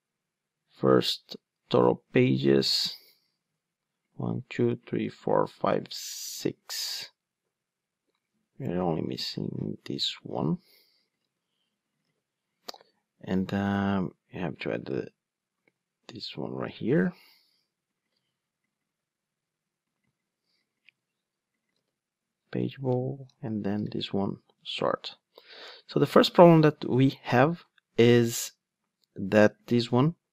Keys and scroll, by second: 9.5 super+c, 10.3 super+d, 11.2 super+v, 15.6 super+c, 16.7 super+v, 18.1 super+c, 21.7 super+v.